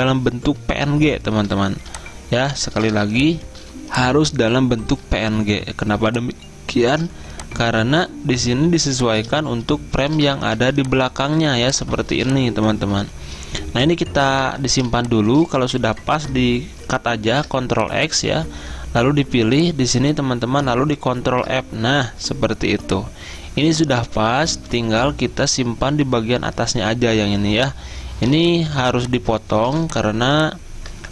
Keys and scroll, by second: 10.6 z, 12.2 typing, 17.4 ctrl+x, 21.4 ctrl+f, 23.6 z, 28.4 z, 29.8 v.